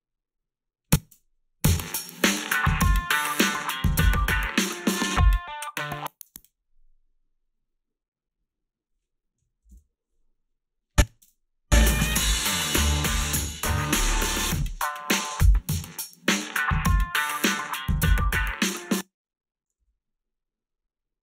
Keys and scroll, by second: 1.1 space, 6.3 space, 9.4 -, 9.7 Return, 9.7 2, 11.2 space, 18.8 space, 19.8 s.